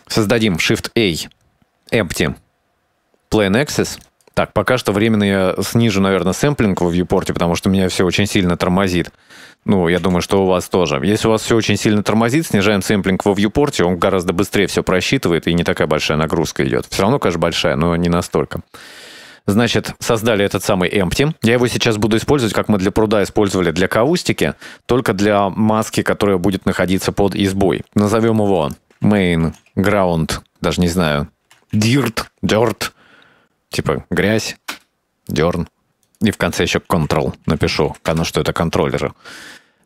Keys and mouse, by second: 0.5 shift+a, 7.8 click, 9.1-11.2 drag, 15.7-17.7 shift+middle drag, 27.0 click, 28.9-35.8 drag.